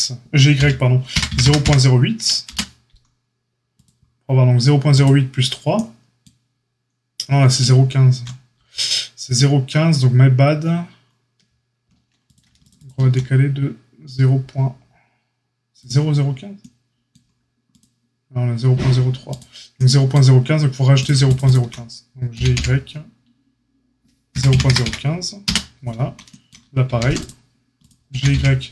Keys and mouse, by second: 4.9 click, 5.0-12.6 middle drag, 12.6 alt+shift+click, 12.6 alt+shift+middle click, 12.7 alt+shift+click, 12.8-21.2 alt+shift+middle drag, 21.2 alt+shift+click, 21.3 alt+shift+middle click, 21.4 alt+shift+click, 21.5-28.7 alt+shift+middle drag, 22.3 g, 26.8 ctrl+r, 28.1 g.